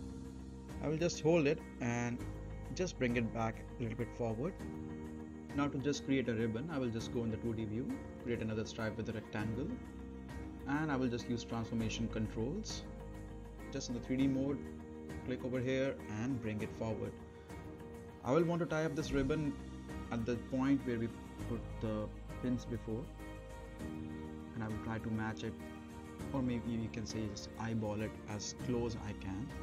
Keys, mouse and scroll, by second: 0.0 shift+click, 0.7-1.3 right click, 1.3-3.7 drag, 4.2-4.7 scroll up 1, 4.7 right click, 5.3 scroll down 1, 5.6 middle click, 7.8-11.9 drag, 14.1-14.7 right click, 15.4 click, 15.8-16.7 right click, 17.0-20.0 drag, 19.4 right click, 20.3 2, 20.6-21.1 scroll down 1, 21.1 middle click, 21.3-22.0 scroll down 1, 22.0 middle click, 22.2-22.5 scroll down 1, 22.8 middle click, 23.8-24.8 drag, 27.5-29.4 right drag, 29.3 scroll up 1, 29.5 middle click.